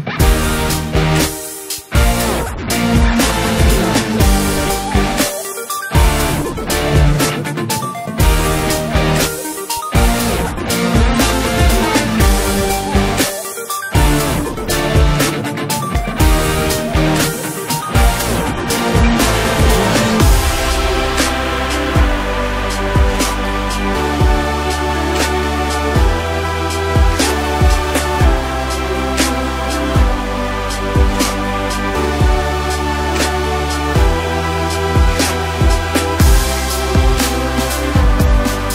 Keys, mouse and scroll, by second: 1.3 KP_Decimal, 2.0-2.6 scroll down 4, 2.6-3.6 middle drag, 3.6 right click, 4.0-4.8 scroll down 6, 4.8 KP_1, 5.4-6.3 scroll up 1, 6.3 s, 8.0 click, 8.3 scroll down 3, 8.5-9.4 middle drag, 9.4-10.0 scroll up 1, 10.0 KP_1, 10.4 ctrl+KP_4, 10.9 ctrl+KP_4, 10.9 ctrl+KP_4, 12.2-12.5 drag, 12.5-12.8 scroll up 2, 12.8 click, 13.3-13.6 scroll up 1, 13.6 Tab, 15.4 drag, 16.2 drag, 16.8 scroll down 1, 19.2 2, 19.9 click, 20.1 click, 21.4 s, 23.2 r, 27.2 click, 27.3 click, 28.1 s, 29.4 r, 31.4 s, 33.3 click, 34.1 s, 35.4 r, 38.0 Tab, 38.4-38.7 scroll down 1.